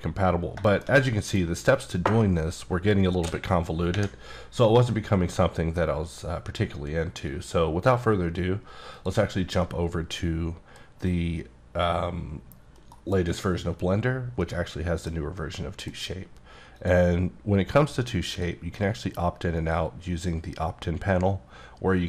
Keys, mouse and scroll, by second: 0.4 scroll down 2, 0.7 shift+middle click, 3.2 d, 4.6 middle click, 9.7 middle click, 11.8-12.9 scroll up 1, 12.9 KP_Decimal, 13.6-14.4 scroll down 4, 14.4 middle click, 15.7 middle click, 16.8 click, 18.3 click, 19.6 click.